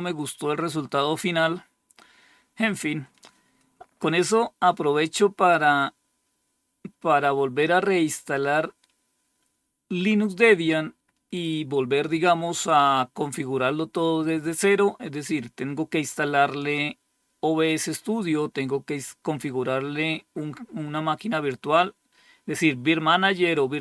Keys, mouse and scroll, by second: 3.6 click.